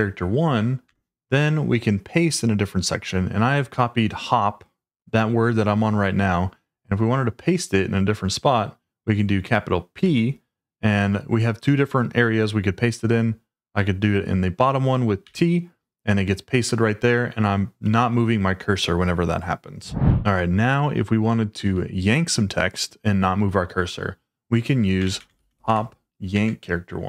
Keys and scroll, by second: 0.8 Return, 9.9 shift+p, 15.2 t, 24.8-26.0 typing, 26.4 Tab.